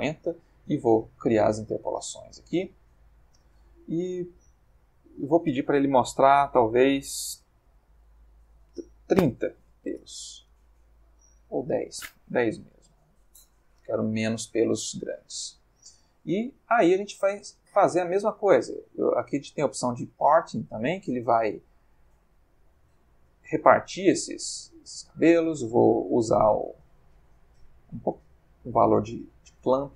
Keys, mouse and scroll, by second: 2.1 click, 2.7-3.6 middle drag, 4.8 click, 7.7 3, 7.8 0, 8.3 shift+Tab, 9.6 3, 9.6 0, 9.9 Return, 11.6 click, 12.3 1, 12.6 0, 12.7 Tab, 12.9 1, 13.0 0, 13.3 Return, 14.5-15.5 middle drag, 16.1 middle click, 17.8 click, 19.0-23.1 drag, 23.4-24.1 drag, 24.4 click, 25.1 click, 26.1-29.9 drag.